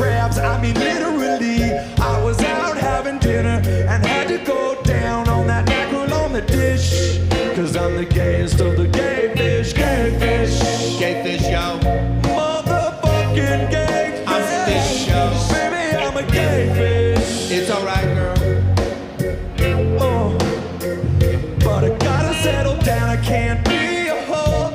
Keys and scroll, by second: 2.0-2.5 scroll, 2.8 scroll, 7.9-8.5 scroll, 9.3 scroll, 12.3-12.8 scroll, 17.9 scroll, 19.1 scroll, 21.4-22.0 scroll.